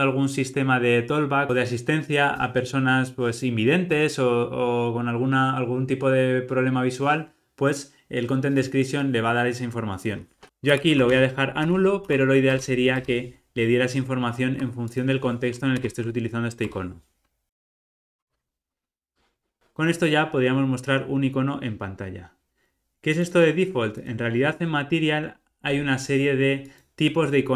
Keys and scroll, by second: 12.5 Return, 15.7 alt+Return.